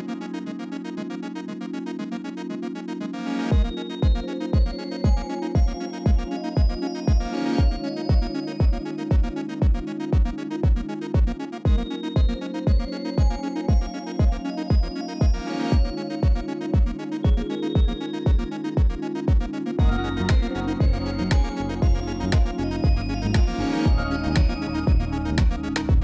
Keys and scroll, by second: 1.7 shift+u, 5.5 u, 8.0 u, 10.8 u, 13.6 u, 15.3 u, 18.8 u, 21.2 u, 24.3 u, 25.6 u.